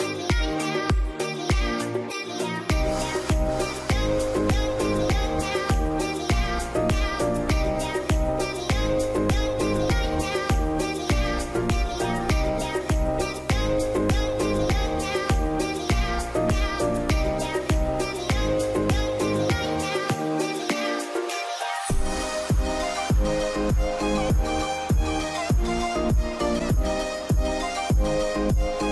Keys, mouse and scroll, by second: 0.4-2.0 scroll down 1, 10.2 space, 15.2 space, 15.7 alt+scroll down 1, 23.4-23.9 typing, 24.3 Return, 25.3 d, 26.1 a, 26.3 ctrl+0.